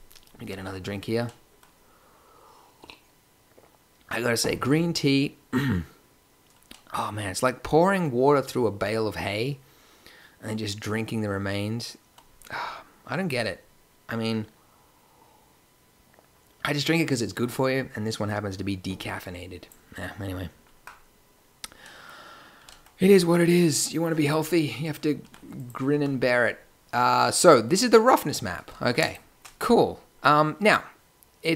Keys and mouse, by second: 22.5 g, 24.3 g, 25.1 g, 25.9 a, 30.0-30.6 middle drag.